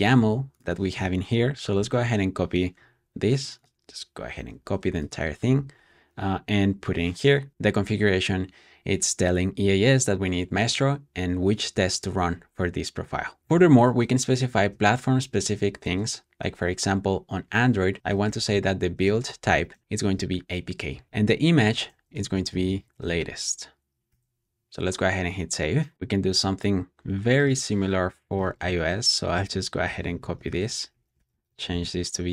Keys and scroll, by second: 1.3 Return, 1.7 super+c, 4.2 super+c, 5.4 super+w, 13.4 shift+', 13.8 shift+;, 15.1 shift+[, 15.7 Return, 17.9-23.6 typing, 24.0 super+s, 26.9 super+c, 28.2 Escape, 28.4-32.3 typing, 28.6 super+v, 29.1 Escape.